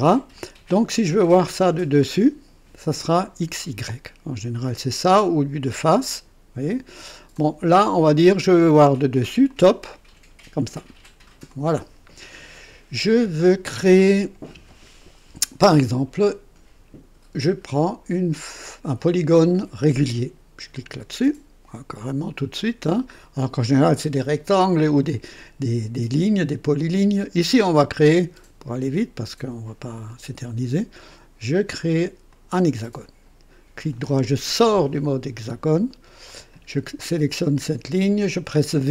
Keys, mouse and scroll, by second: 0.3-1.0 drag, 2.0 click, 5.6 click, 7.3 click, 9.4 click, 11.5 click, 20.7 click, 30.0 click, 32.3 click, 33.9 right click, 36.2 click.